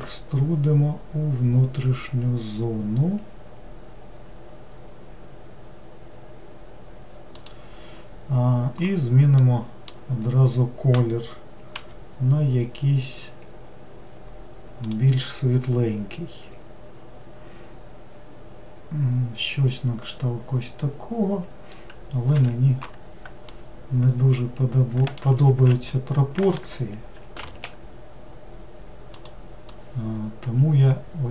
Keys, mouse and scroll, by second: 0.0 e, 9.4-11.7 middle drag, 11.7 g, 22.3 1, 23.5-25.5 middle drag, 25.5 alt+x, 27.4 alt+z, 29.2 click.